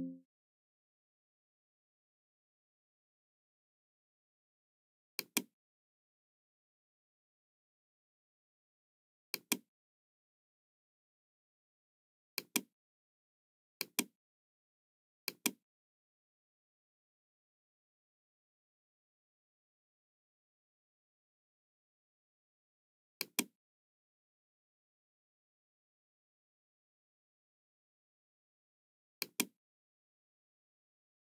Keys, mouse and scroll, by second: 5.1 click, 9.3 click, 12.3 click, 13.8 click, 14.3-14.6 scroll down 1, 15.3 click, 16.8 middle click, 17.9 scroll up 1, 18.5-18.8 scroll down 1, 20.2 scroll down 1, 23.2 click, 29.1 click.